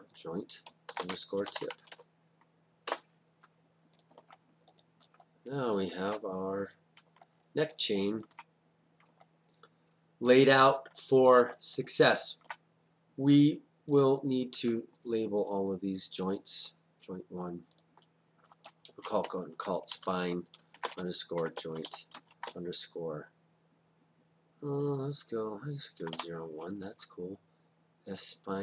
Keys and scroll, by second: 0.9 shift+-, 1.4 shift+t, 1.5 i, 1.7 p, 2.9 Return, 19.3-22.4 typing, 26.0 0, 26.2 1.